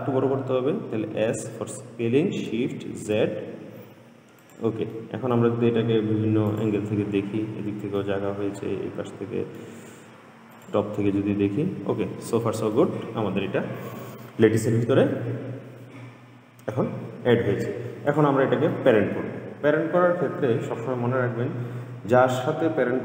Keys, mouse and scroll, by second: 1.4 s, 5.2-6.8 middle drag, 6.8 click, 8.3-10.8 middle drag, 10.8 click, 13.0-16.1 middle drag, 18.3 click, 19.0-22.1 middle drag.